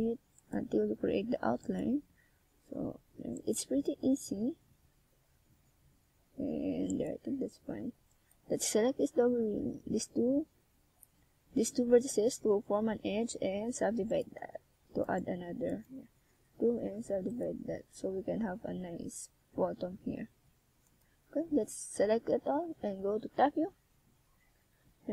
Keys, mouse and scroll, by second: 0.0 click, 0.1 r, 0.9 click, 1.1 g, 2.4 click, 3.2 ctrl+z, 3.6 ctrl+z, 4.2 ctrl+z, 4.6 ctrl+z, 5.8 r, 6.4 click, 6.8 e, 7.6 click, 8.2 g, 8.8 click, 9.1 r, 9.8 click, 10.4 g, 11.2 click, 11.5 e, 12.3 click, 12.6 g, 13.2 click, 13.7 r, 14.5 click, 14.6 g, 16.1 click, 16.4 r, 17.6 click, 19.2 a, 19.6 z, 19.9 c, 24.0 z.